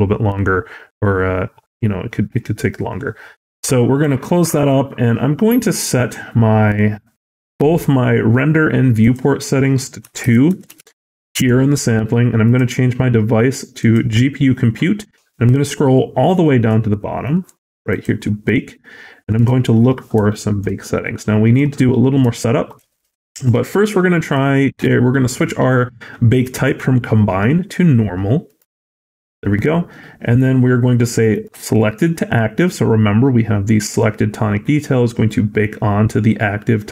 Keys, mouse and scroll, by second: 8.9 click, 15.0-15.7 scroll down 1, 17.4-17.8 scroll down 18, 17.8 click, 18.7-19.0 scroll down 1, 20.2 shift+middle click, 20.7 middle click, 22.2 shift+middle click, 23.2 scroll down 1, 24.1 click, 29.8 scroll down 1, 31.2 click, 31.2 scroll down 3.